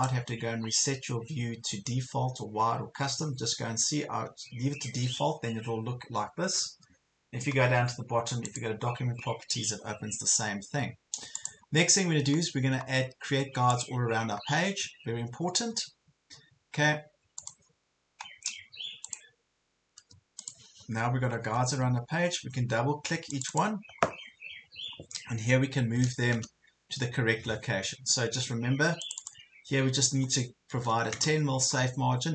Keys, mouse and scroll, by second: 21.2-21.7 scroll down 2, 22.3 ctrl+scroll up 1, 23.3 click, 26.0 KP_1, 26.2 KP_0, 29.1 click, 30.8 KP_1, 31.7 KP_0.